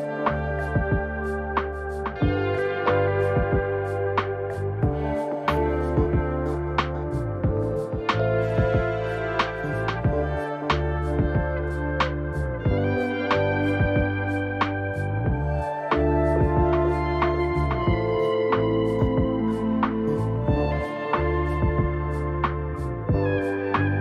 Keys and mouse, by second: 6.3 ctrl+r.